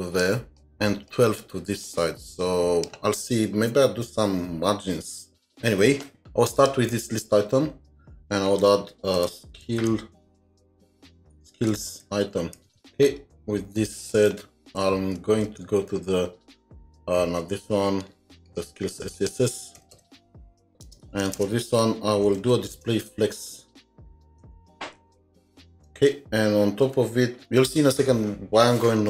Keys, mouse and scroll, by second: 1.8 double click, 1.9 space, 5.4 Tab, 8.6 Tab, 9.2-12.8 typing, 14.0 shift+click, 14.4 typing, 14.6 ctrl+s, 15.5 ctrl+Tab, 17.6 ctrl+Tab, 19.1 double click, 19.8 Return, 19.9 Return, 20.3-21.1 typing, 21.3 Return, 22.4 Down, 22.7 Return, 23.1 Up, 23.5 Up, 23.8 End, 24.4 Tab, 25.8 Return, 27.4 ctrl+s.